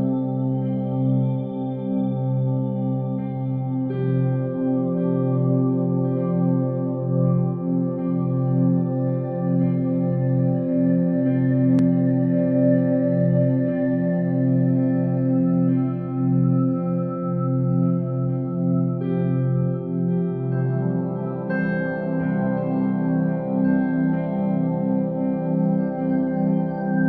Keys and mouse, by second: 0.5 g, 2.6 r, 4.3 g, 5.7-6.8 middle drag, 7.7-9.3 drag, 9.6 s, 10.7 g, 12.7-13.1 middle drag, 15.0-15.3 middle drag, 16.1 click, 17.8 drag, 18.4-20.0 drag, 24.6 click, 25.2 click, 26.7-27.0 middle drag.